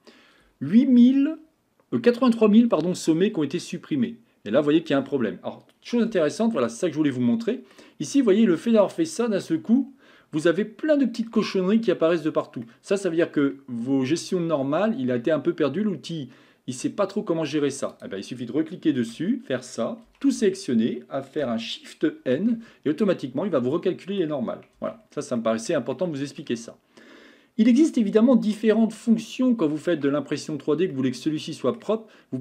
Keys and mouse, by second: 6.1 Tab, 6.6-7.7 middle drag, 8.8 middle click, 10.4-11.2 middle drag, 12.7-13.4 middle drag, 15.3-17.5 middle drag, 19.1 Tab, 20.1 a, 20.4 a, 22.4 shift+n, 22.9-24.2 middle drag, 24.8 Tab, 25.4 middle click, 25.9-26.4 shift+middle drag, 29.0 middle click, 31.0-31.8 middle drag.